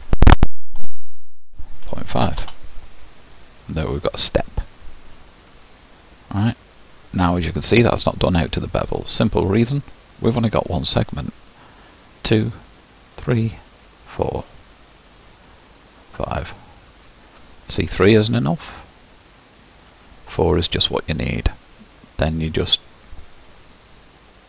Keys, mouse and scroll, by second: 8.0-12.4 middle drag, 12.4-24.4 drag.